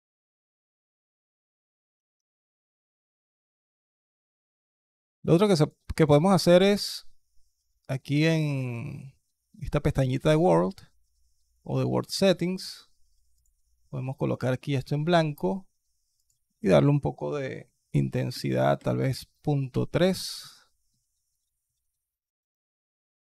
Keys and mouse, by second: 1.4 click, 5.4 click, 5.8 click, 13.2 click, 16.1-19.5 drag, 23.2-23.3 drag.